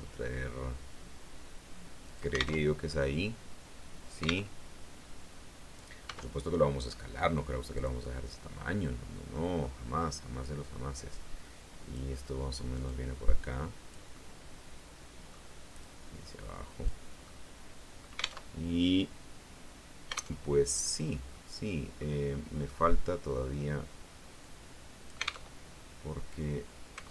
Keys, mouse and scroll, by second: 2.0 alt+click, 2.4 alt+Tab, 4.3 alt+Tab, 5.9 s, 7.6-9.4 drag, 7.9 right click, 8.8 middle click, 9.5 middle click, 10.5-12.0 drag, 12.8-14.0 drag, 14.0-15.4 middle drag, 15.7-17.0 drag, 17.2-18.3 middle drag, 18.0 alt+click, 18.3 alt+Tab, 20.2 alt+Tab, 20.7-21.2 scroll up 2, 21.2 click, 21.2 middle click, 22.4 middle click, 24.3 click, 25.3 alt+Tab.